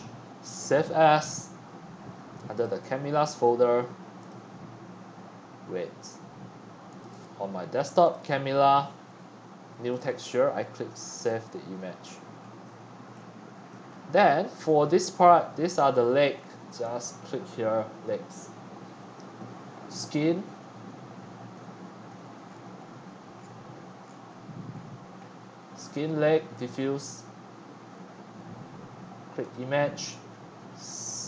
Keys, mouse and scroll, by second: 1.4-1.8 drag, 2.8 click, 3.4-4.3 drag, 4.3-6.5 middle drag, 6.5 click, 8.1 click, 8.3 click, 9.6-10.0 drag, 10.0 middle click, 10.1-12.3 drag, 12.3 middle click, 12.4-13.1 scroll up 3, 13.1-14.7 middle drag, 16.8 shift+middle click, 17.0-20.3 drag, 20.3 middle click, 21.1-21.8 scroll, 22.3 scroll, 22.7-26.7 middle drag, 24.8 scroll, 24.8 scroll, 25.1 scroll, 25.2 scroll, 25.3 scroll, 26.2-26.7 scroll up 1, 26.7-27.9 drag, 27.9-29.5 scroll up 5, 29.5-30.0 drag, 30.7 click.